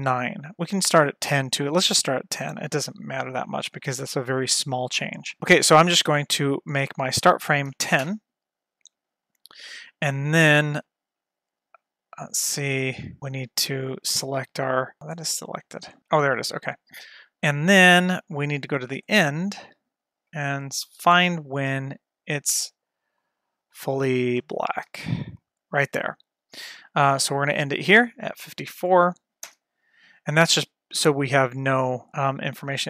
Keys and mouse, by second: 0.6 Right, 5.4 ctrl+z, 7.1-8.8 drag, 9.8 middle click, 11.9 middle click, 18.0-19.1 drag, 20.4 shift+middle drag, 21.4 shift+middle click, 23.7 Right, 24.1 Right, 24.5 Right, 24.9 Right, 28.7-30.2 drag, 31.5 click.